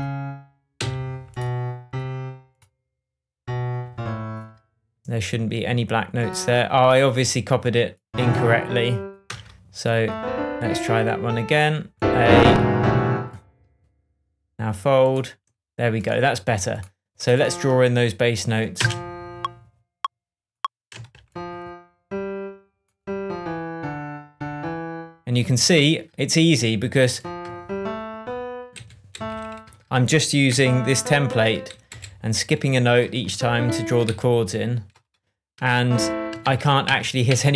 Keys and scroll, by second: 0.7 Down, 9.2 BackSpace, 18.7 space, 20.9 space, 21.4 alt+space, 28.7 alt+Right, 29.1 Down, 31.6 alt+Right, 31.8 Left, 33.2 alt+Left, 34.0 alt+Right, 35.0 Right, 36.4 super+d.